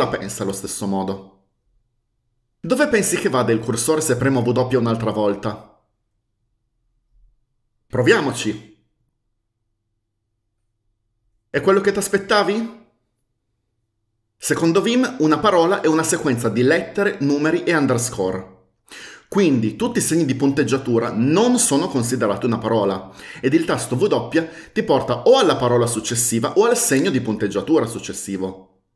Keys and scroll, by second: 8.4 w.